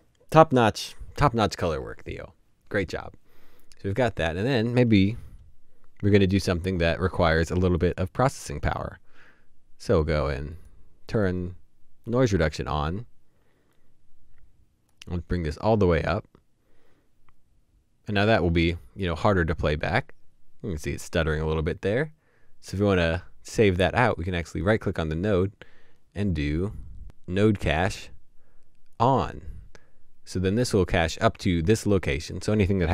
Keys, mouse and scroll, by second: 24.4 Up.